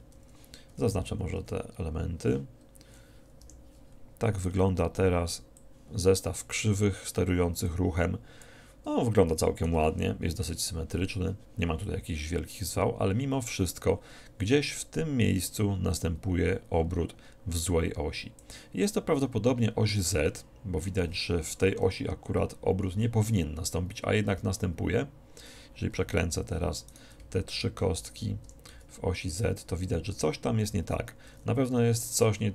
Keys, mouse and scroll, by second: 0.5 Home, 0.8 a, 1.0-2.2 middle drag, 1.0 a, 1.5 a, 6.9 Home, 6.9 click, 7.8-13.3 drag, 14.9-16.7 drag, 19.0-22.1 middle drag, 22.3 KP_7, 26.9-29.8 right drag, 28.5 r, 32.1 r.